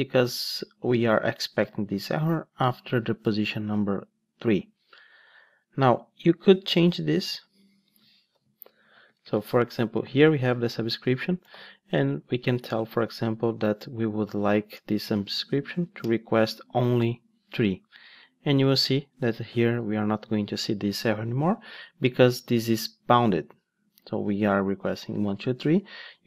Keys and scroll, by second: 9.4 ctrl+space, 10.5 Return, 14.7 Return, 19.5 ctrl+shift+d.